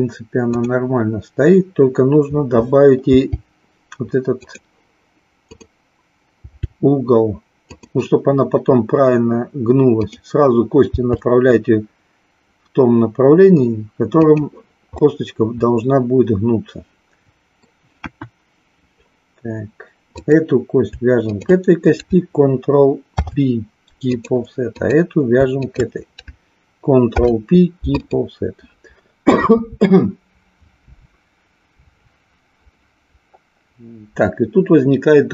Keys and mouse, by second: 0.6 click, 3.0 g, 5.6 click, 6.3 g, 7.7 click, 9.9 click, 10.9 g, 14.9-17.7 middle drag, 18.0 KP_1, 20.2 click, 21.2 shift+click, 24.7 click, 25.6 shift+click.